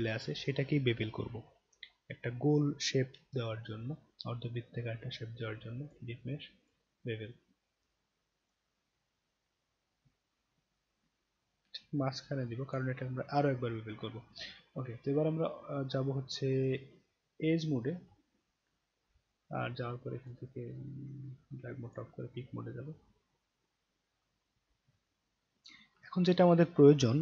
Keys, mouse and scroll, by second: 5.8 click, 6.6 click, 8.4 click, 9.9-12.7 drag, 14.0-15.3 right drag, 15.8-17.7 right drag, 18.0 scroll down 1, 18.7 middle click, 18.9 middle click, 20.2 click, 21.9 click, 23.8-24.2 alt+middle drag, 25.0-25.5 alt+middle drag.